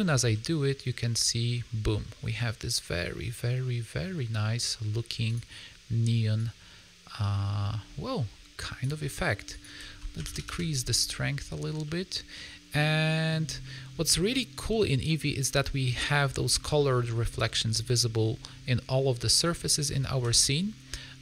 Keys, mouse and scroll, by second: 0.0 a, 0.2 a, 0.4 middle click, 5.2 click, 9.4 click, 11.8 middle click, 13.0 middle click, 13.6 middle click, 13.9 scroll up 2, 14.2 middle click, 15.9 middle click, 16.7 middle click, 18.3 middle click, 19.2 click, 19.6 middle click, 20.1 g.